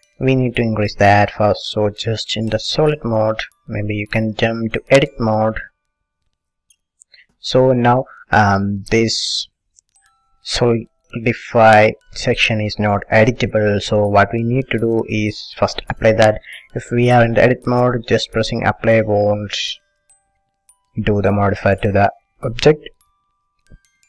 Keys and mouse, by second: 1.9 click, 3.0 click, 3.4-4.6 middle drag, 5.9 click, 6.5-12.2 middle drag, 18.3-20.3 drag.